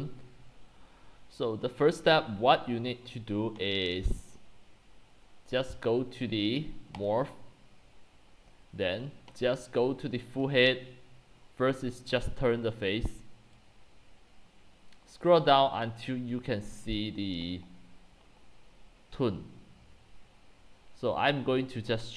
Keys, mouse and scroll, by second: 1.5-2.4 scroll down 5, 7.1-8.6 drag, 8.6-10.0 scroll down 4, 10.0-10.4 scroll down 1, 10.4 click, 13.6-15.7 drag, 16.8-18.6 drag, 18.7-20.5 drag, 20.6 click, 21.3-21.8 drag.